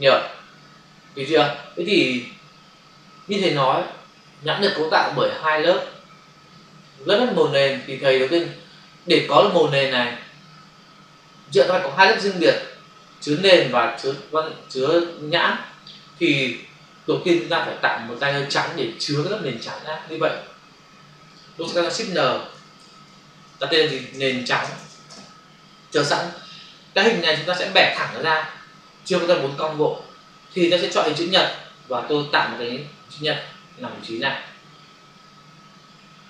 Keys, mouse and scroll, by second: 21.3 click, 22.8 ctrl+shift+n, 23.8-25.0 typing, 25.0 Return, 31.2 click, 31.4 click, 33.4 click.